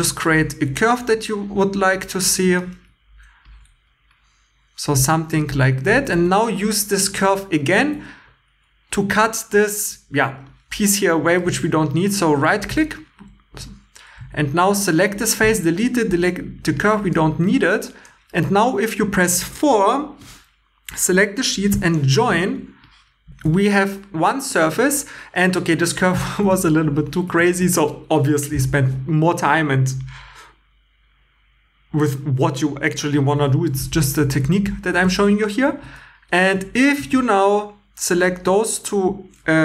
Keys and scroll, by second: 3.7 g, 6.1 2, 9.4 c, 14.2 Tab, 15.4 x, 16.1 x, 21.7 j, 23.4 shift+e, 26.6 shift+e, 35.7 2.